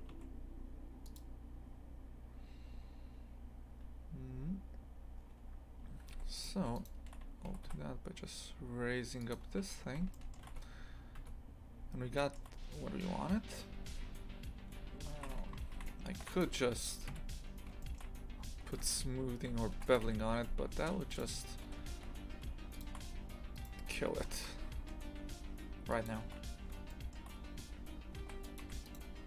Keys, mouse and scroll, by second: 6.1 2, 6.4 right click, 6.8 shift+right click, 7.5 g, 9.5 scroll down 1, 10.1 shift+middle click, 10.5 shift+Tab, 12.2 shift+middle click, 13.0-14.4 scroll up 1, 15.1 shift+f, 17.1 KP_3, 17.8 shift+middle click, 18.2 scroll up 2, 18.8 Tab, 19.5 a, 19.7 ctrl+r, 20.5 1, 21.1 right click, 21.6 g, 23.6 right click, 24.1 g, 26.9-28.2 shift+middle drag, 28.2 ctrl+r, 28.9 right click.